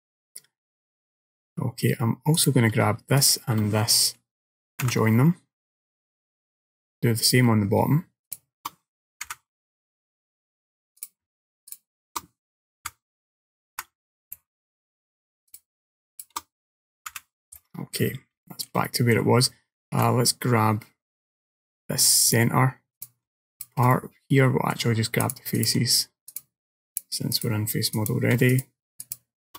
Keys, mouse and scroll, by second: 0.2 middle click, 1.5-2.4 scroll up 1, 2.4 click, 3.3 shift+click, 4.9 j, 6.0 middle click, 7.3 click, 8.3 shift+click, 9.3 j, 9.9 shift+middle click, 11.1 click, 11.8 click, 12.9 l, 13.8 j, 14.4 middle click, 15.6 shift+click, 16.2 shift+click, 17.2 j, 17.6 middle click, 18.2-18.5 scroll down 3, 18.5 shift+middle click, 18.9 middle click, 20.4 middle click, 22.4 click, 23.0 click, 23.6 ctrl+click, 24.0 middle click, 25.3 ctrl+click, 25.6 ctrl+click, 26.4 ctrl+click, 27.0 ctrl+click, 27.4 ctrl+click, 28.0 ctrl+click, 28.6-29.2 ctrl+shift+click, 29.1 ctrl+click.